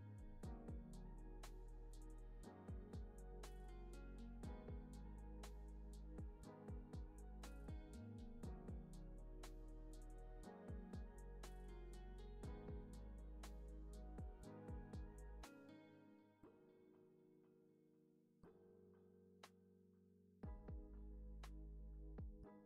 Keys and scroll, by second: 7.5 super+c, 7.7 super+v, 9.2 x, 10.1 x, 13.2 super+c, 13.4 super+v, 18.6 x, 20.1 c, 20.7 alt+w, 22.3 x.